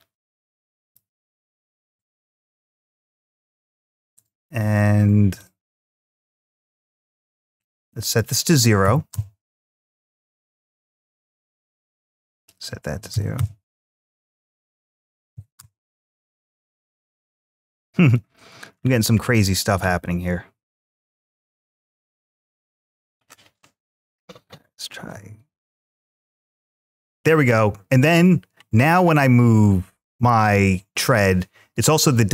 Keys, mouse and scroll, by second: 1.6-3.8 drag, 5.2-7.5 drag, 7.9-8.9 drag, 10.2-11.9 drag, 12.1-13.2 drag, 14.4-15.4 drag, 16.3-18.0 drag, 18.5-19.4 scroll down 3, 21.1-23.1 drag, 23.4-24.9 scroll up 4, 24.9 g.